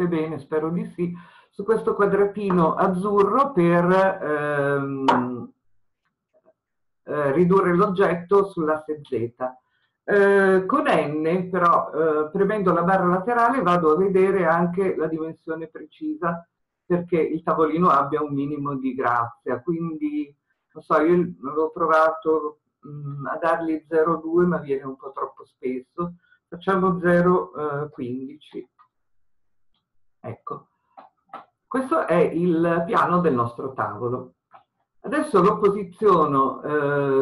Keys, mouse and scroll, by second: 11.1 n, 31.2 scroll up 1, 32.8-37.2 middle drag.